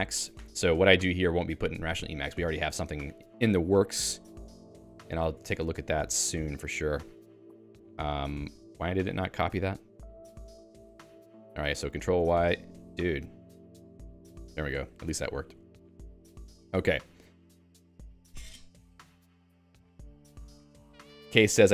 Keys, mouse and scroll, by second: 2.5 ctrl+w, 3.4 Escape, 4.0 i, 4.6 Return, 4.9 ctrl+y, 5.6 BackSpace, 6.9 Escape, 11.1 Escape, 11.7 i, 12.0 ctrl+y, 12.8 BackSpace, 13.8 Escape, 14.0 p, 15.0 Escape, 15.0-17.4 typing.